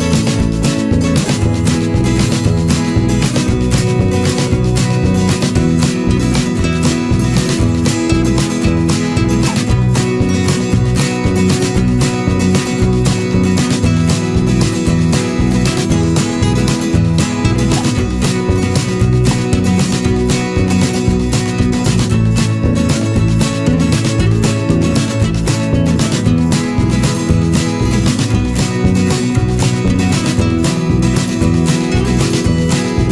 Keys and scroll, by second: 1.9 ctrl+z, 8.4 ctrl+=, 8.5 ctrl+space, 14.5 ctrl+-, 20.0 Return, 20.8 ctrl+=, 21.1 ctrl+space, 27.4 ctrl+-, 28.1 ctrl+=.